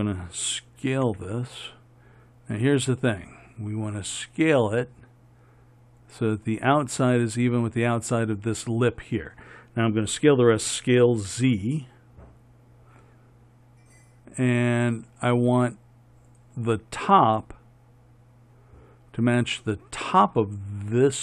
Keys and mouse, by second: 1.2 s, 10.9 s.